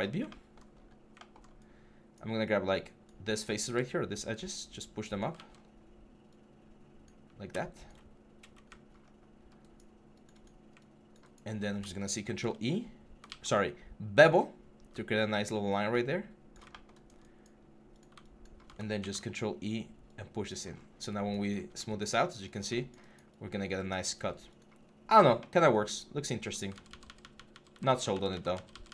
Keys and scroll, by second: 3.5 w, 5.2 ctrl+z, 5.4 1, 8.9 6, 12.0 ctrl+e, 13.1 ctrl+z, 18.8 ctrl+e, 26.5 ctrl+z.